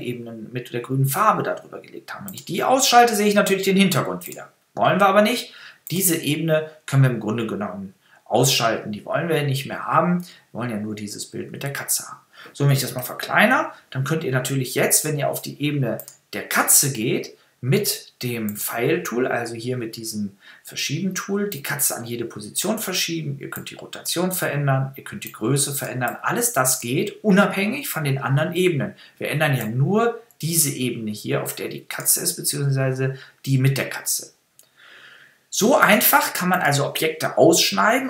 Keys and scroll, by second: 13.0 super+-.